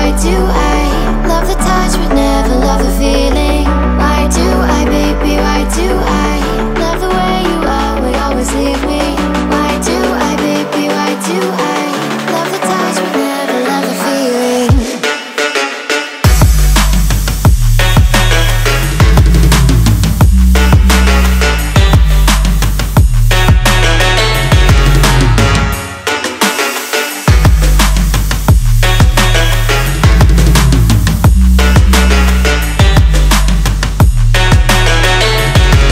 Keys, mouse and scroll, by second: 0.0 click, 2.3-6.6 drag, 6.6 ctrl+a, 11.4 click, 12.9 click, 13.6-28.8 drag, 28.8 w, 34.0 p.